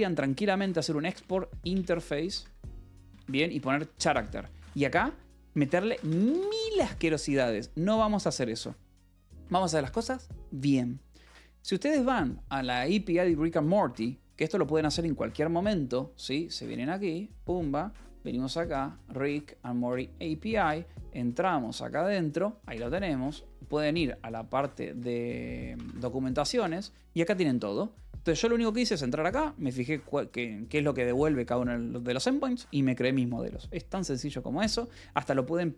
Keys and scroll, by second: 0.1-9.8 typing, 5.0 Return, 18.2-19.2 typing, 19.8 Return, 20.5-24.2 typing, 24.8 Escape, 25.2-28.5 typing.